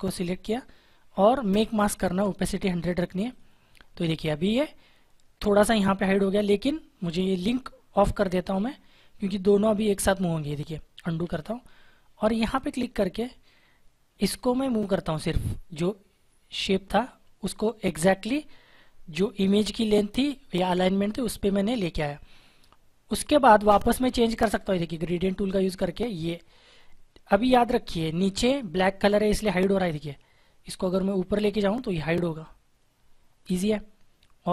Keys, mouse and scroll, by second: 3.2 click, 9.7 click, 11.1 ctrl+z, 12.4 click, 25.1 click, 29.5 click.